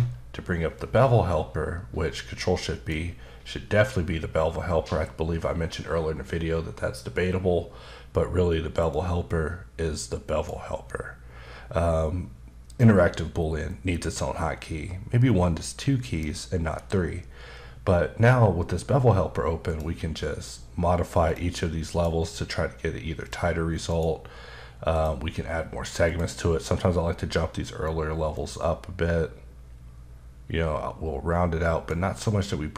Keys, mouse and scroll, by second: 0.8 click, 8.9 click, 19.7 click, 21.2 click, 21.9 click, 23.9 click, 24.9 click, 26.0 click, 28.3 click.